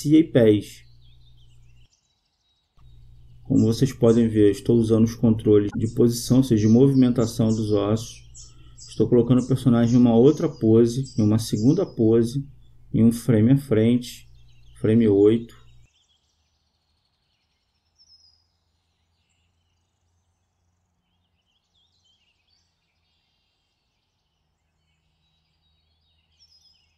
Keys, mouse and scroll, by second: 1.5-2.6 right drag, 2.3 click, 3.3 click, 4.6-7.9 drag, 8.4-9.7 right drag, 9.1 click, 13.5-15.2 right drag, 14.4-16.2 drag, 23.6-25.2 right drag, 25.2-26.9 drag.